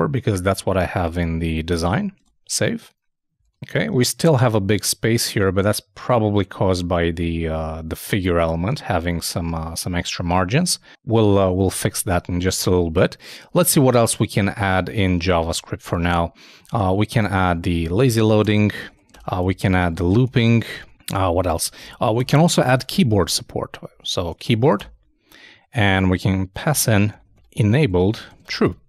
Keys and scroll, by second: 1.8 super+s, 2.1 super+Tab, 3.4 super+r, 15.5 super+Tab, 16.6 super+,, 17.4-20.7 typing, 18.7 shift+Return, 23.6-24.9 typing, 27.7-28.6 typing.